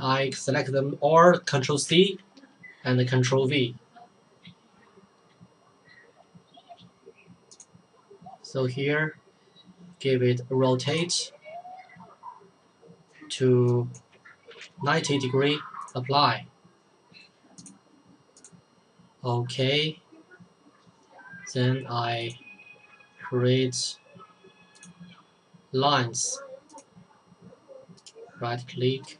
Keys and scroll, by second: 1.9 ctrl+c, 3.2 ctrl+v, 14.2-15.1 typing.